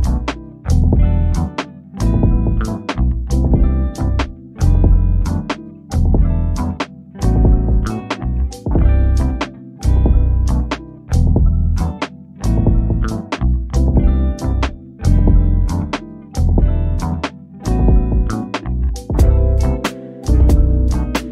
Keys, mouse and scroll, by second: 0.4 scroll up 1, 1.2 shift+click, 3.8 ctrl+d, 4.4 click, 5.4 1, 6.2 Return, 7.7 scroll up 1, 7.9 click, 12.3 scroll down 1, 12.9 scroll up 1, 13.7 shift+click, 15.1 click, 18.0 ctrl+d, 18.7 click, 19.6 1, 20.2 Return.